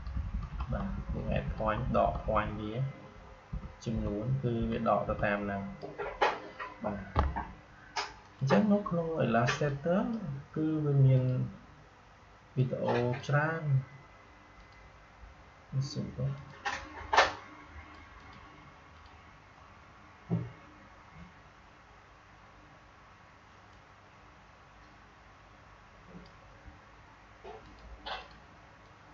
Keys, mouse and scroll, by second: 4.0 Down, 8.2-18.2 drag, 23.7-29.1 drag.